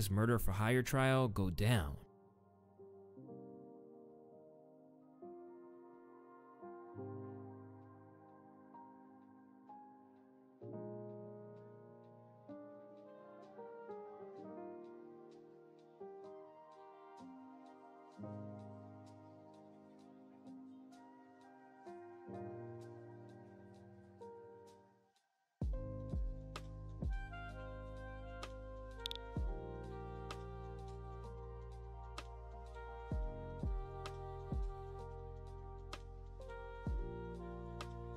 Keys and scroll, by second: 1.8 space, 2.0 ctrl+s, 21.3-22.1 typing, 26.1 typing, 26.7 Return, 28.4-29.5 typing, 37.1 u, 37.9 space.